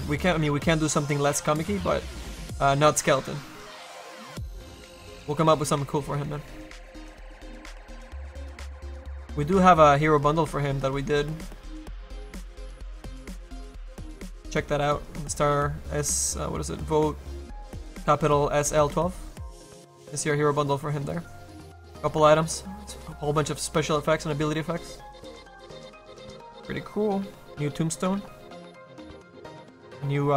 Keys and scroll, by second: 7.0 ctrl+z.